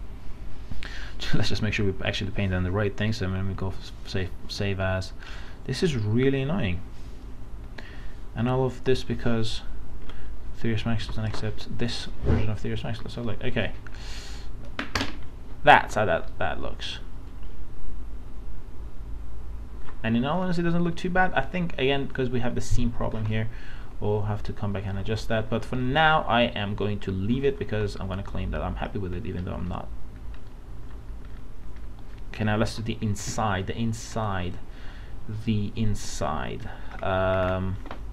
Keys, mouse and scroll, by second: 2.1 click, 11.1 alt+Tab, 13.0 click, 13.3 scroll up 1, 14.3 scroll up 1, 16.4 middle click, 23.4 alt+middle click, 25.8-27.3 alt+middle drag, 27.6 scroll down 1, 27.8 alt+middle click, 28.9 scroll down 1, 29.2 scroll up 1, 29.7 alt+middle click, 31.2-31.5 scroll up 1, 32.7 alt+Tab, 34.1-36.8 drag, 36.9-37.4 alt+scroll down 2.